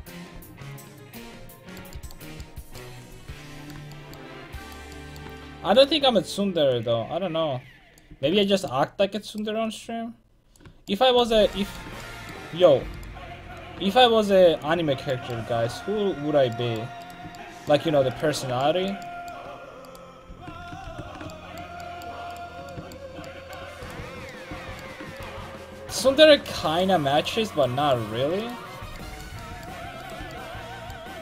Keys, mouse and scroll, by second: 1.3-4.6 middle drag, 4.6-8.0 right drag, 6.7-9.3 drag, 8.1 a, 9.3-10.6 right drag, 9.9 click, 10.9 click, 10.9 right click, 13.0-14.6 right drag, 13.6-14.6 drag, 14.8 click, 14.9 a, 15.5 alt+z, 15.9 alt+z, 20.3 ctrl+x, 20.6 a, 20.9 ctrl+t, 21.5 a, 29.2-30.4 drag, 30.4-31.2 right drag.